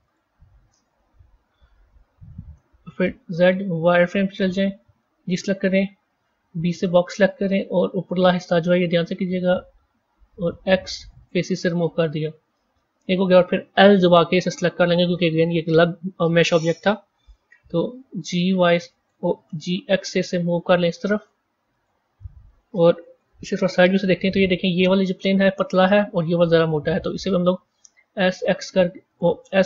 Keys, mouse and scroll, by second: 1.0 KP_1, 1.4-2.2 scroll up 4, 2.2-3.1 scroll up 1, 3.1 z, 5.2 a, 6.5 b, 10.4 x, 14.5 l, 15.0 scroll down 4, 18.0 g, 19.5 g, 23.1 KP_3, 27.8 s, 29.4 s.